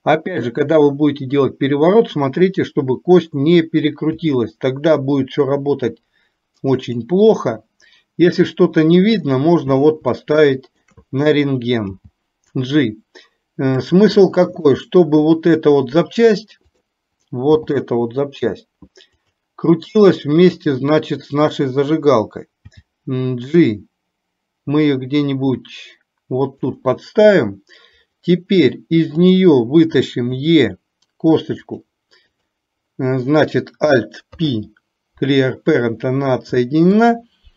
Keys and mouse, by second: 4.2 s, 10.2 shift+middle click, 12.0 g, 14.7 shift+middle click, 16.8 click, 17.6 g, 20.7 click, 22.7 g, 30.5 e, 32.5 click, 34.5 alt+p, 36.7 shift+middle click.